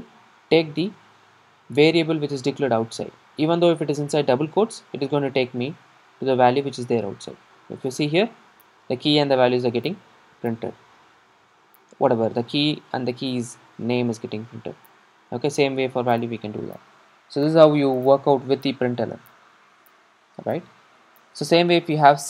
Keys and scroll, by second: 0.9 super+r.